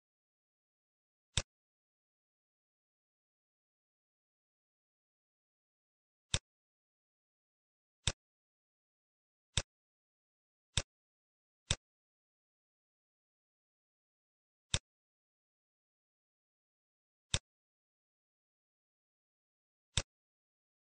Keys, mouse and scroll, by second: 1.0 click, 6.3 click, 8.0 shift+click, 9.7 click, 11.7 click, 13.5 ctrl+shift+d, 17.4 click, 20.6 middle click.